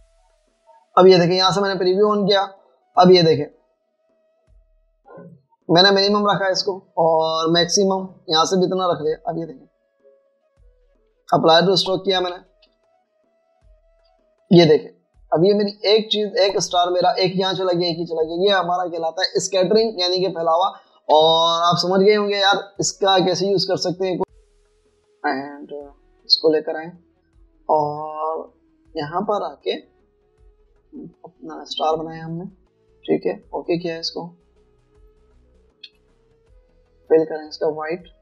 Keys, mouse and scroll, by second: 10.9 alt+scroll up 1, 12.3-12.9 alt+scroll up 1, 12.9 alt+scroll down 1, 13.1 alt+scroll up 1, 13.9 alt+scroll down 1, 14.1 alt+scroll up 1, 14.3 alt+scroll down 1, 14.7 alt+scroll up 1, 14.9 alt+scroll down 1, 16.4 v, 17.9 v, 18.1 alt+scroll down 1, 22.2 v, 24.2 double click, 24.5 space, 31.5 right click, 32.9 double click, 36.9 v.